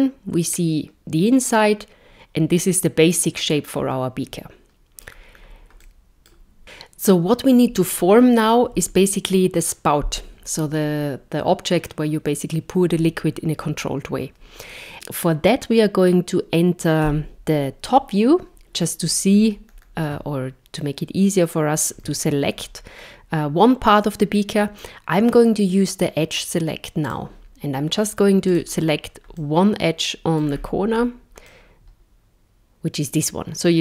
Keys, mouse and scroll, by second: 5.1 scroll, 5.1-5.8 scroll down 2, 5.8 middle click, 17.1 KP_7, 19.3-20.0 scroll up 4, 20.8 shift+middle click, 22.5-22.9 scroll up 3, 27.0 click, 28.5 click, 29.4 middle click, 30.5-31.5 scroll down 5, 31.5 middle click.